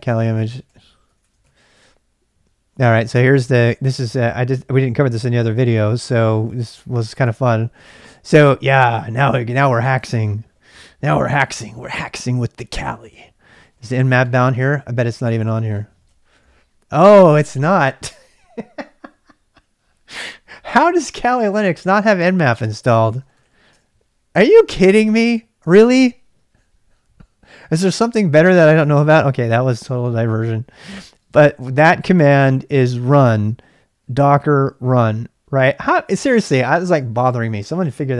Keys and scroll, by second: 0.0-2.0 typing, 7.3 Return, 11.2-16.4 typing, 17.5-18.3 typing, 22.9-24.1 typing, 26.5 typing, 35.5 e.